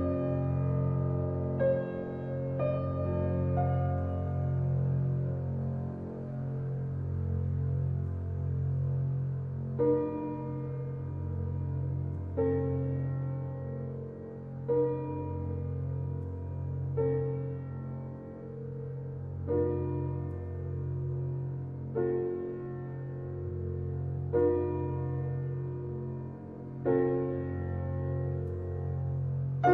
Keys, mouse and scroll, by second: 1.3 click, 6.4-9.5 drag, 10.9-12.0 middle drag, 12.0 click, 12.6-13.1 scroll up 1, 13.1-14.4 scroll down 1, 14.4 click, 15.5-16.1 scroll down 1, 16.1-16.9 scroll up 1, 16.9 i, 18.7 e, 21.2-21.5 scroll up 1, 21.5 shift+middle click, 21.9-22.3 scroll up 1, 22.3-23.4 shift+middle drag, 23.4 ctrl+r, 26.5 ctrl+r, 28.5 scroll down 2, 29.0 Tab.